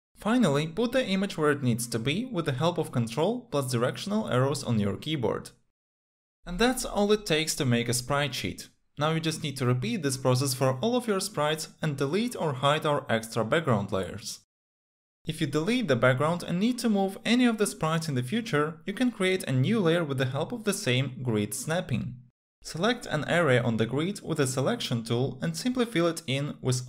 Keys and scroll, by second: 1.4 ctrl+Up, 2.9 ctrl+Left, 10.1 ctrl+c, 10.9 ctrl+v.